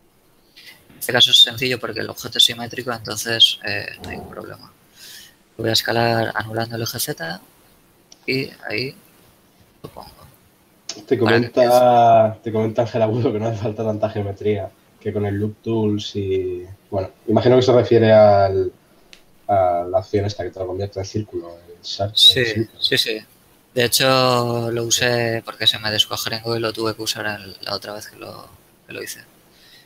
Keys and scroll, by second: 3.0 KP_7, 5.7 s, 6.3 shift+z, 14.9 a.